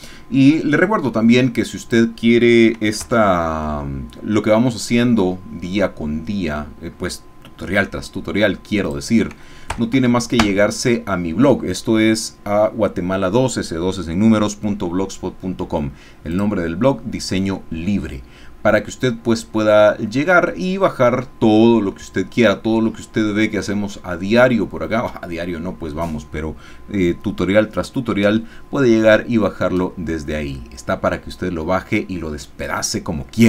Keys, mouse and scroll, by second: 3.0 alt+s, 6.0-6.7 scroll down 2, 6.7-7.5 scroll down 1, 7.5-8.8 scroll down 1, 8.8 click, 9.7 KP_Add, 10.5 KP_Enter, 16.4 click, 19.2-19.7 scroll down 2, 19.7-21.5 scroll up 2, 21.5 scroll down 1, 21.7-24.7 drag, 25.0-26.8 scroll up 2, 26.8-29.9 scroll up 1, 29.9-31.5 scroll up 1, 31.5-32.1 scroll up 1, 32.1-33.4 scroll up 1.